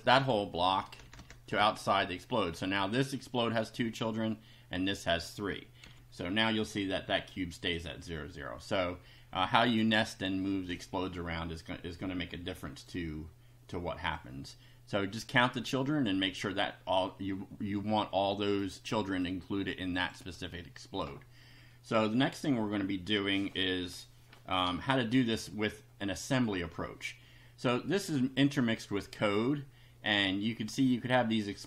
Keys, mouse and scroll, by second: 0.8 Return, 1.6 ctrl+v, 5.8 F5, 7.3 click, 12.6 click, 13.7 click, 15.2 click, 19.1 click, 20.0 click.